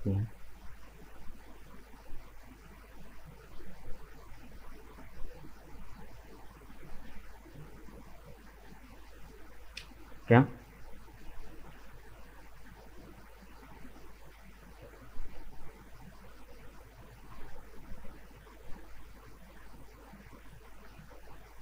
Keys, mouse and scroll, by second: 0.0 right click, 0.6-2.4 middle drag, 2.4 right click, 3.1 shift+right click, 3.6-6.7 middle drag, 8.7 scroll down 2, 9.3-10.3 middle drag, 10.3-10.8 scroll down 1, 10.8-13.9 middle drag, 14.8-17.6 middle drag, 17.6 right click, 18.0-19.3 middle drag, 19.3 shift+right click, 20.0 shift+right click, 20.5-21.6 shift+middle drag.